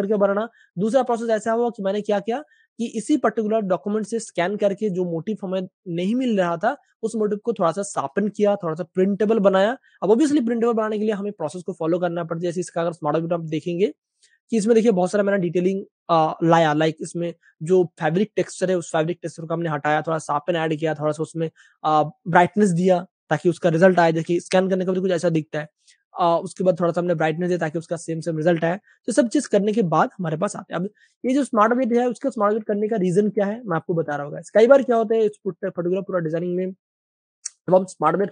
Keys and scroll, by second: 8.3 super+space, 9.2 v, 13.2 space, 27.9 super+w, 30.3 super+w, 32.5 v, 34.0 super+space, 35.1 v, 37.8 Page_Up.